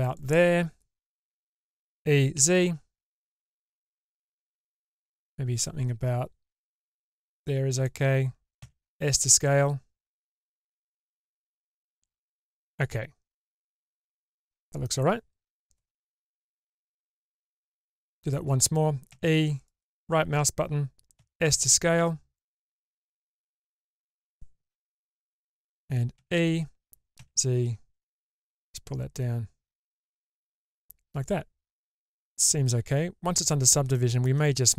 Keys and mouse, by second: 1.8 e, 8.6 s, 11.1-14.8 middle drag, 17.1 middle click, 19.1 e, 21.1 s, 22.7-25.6 middle drag, 26.2 e, 30.8-33.9 middle drag, 34.3 shift+middle click.